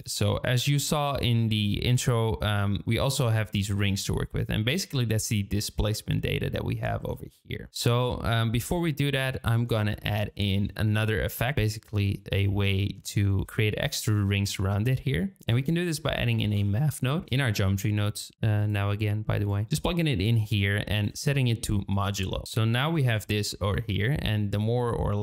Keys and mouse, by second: 2.5 shift+middle click, 7.1 shift+middle click, 12.6 shift+middle click, 14.5 shift+a, 19.4 click, 20.9-22.1 drag, 23.4-25.2 drag.